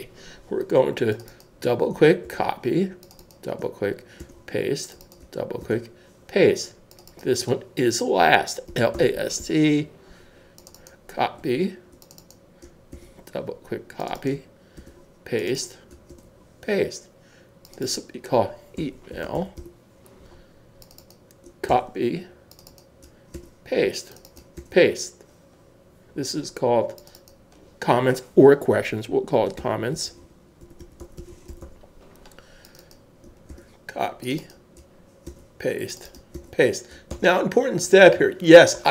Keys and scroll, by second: 0.0-0.3 typing, 2.2 super+c, 4.2 super+v, 8.7-10.3 typing, 12.9 super+c, 14.8 super+v, 18.8-20.3 typing, 21.7 super+c, 23.3 super+v, 24.6 super+v, 29.6-32.3 typing, 33.5 super+c, 35.2 super+v, 37.1 super+s.